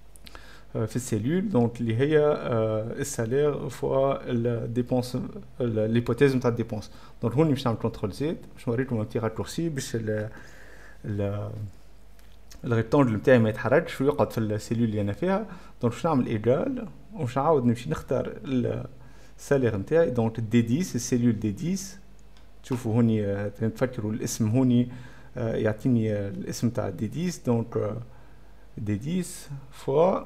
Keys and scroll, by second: 6.9 Scroll_Lock, 8.3 ctrl+z, 15.0-17.1 typing, 15.4 F11, 29.4-30.2 typing.